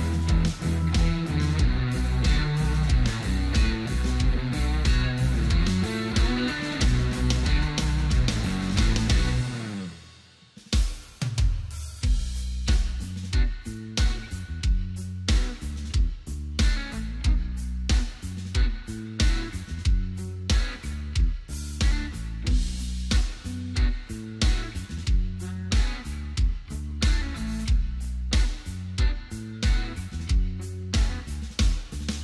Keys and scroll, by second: 22.4 ctrl+x, 31.4 ctrl+f.